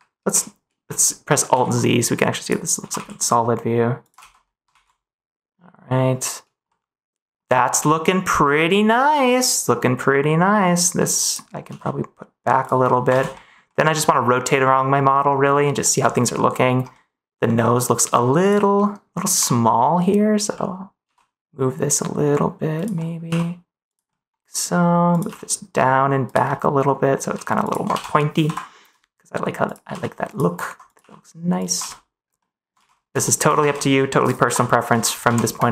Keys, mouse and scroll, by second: 0.2 alt+a, 1.4 alt+z, 2.7 g, 2.9 z, 3.9 click, 4.1 ctrl+z, 4.6 alt+a, 6.6 middle click, 7.7-9.6 middle drag, 9.9 middle click, 11.6 g, 12.5 click, 12.8 middle click, 13.0 ctrl+s, 13.3 middle click, 13.6 middle click, 13.9 middle click, 14.3 middle click, 15.0 scroll up 1, 15.7 middle click, 16.3 scroll up 1, 16.3 middle click, 16.9 scroll up 1, 17.0 middle click, 17.5 scroll up 1, 17.6 middle click, 18.7 middle click, 19.4 middle click, 20.5 middle click, 21.0 g, 22.7 click, 22.9 middle click, 23.2 g, 23.8 click, 24.0 middle click, 25.2 g, 26.2 click, 26.4-27.8 middle drag, 27.8 g, 27.9 ctrl+s, 29.6 click, 29.8 g, 30.2 click, 30.9 g, 31.7 ctrl+s, 32.3 middle click, 33.2 scroll up 1, 34.4 KP_1, 35.2 ctrl+s, 35.6 click.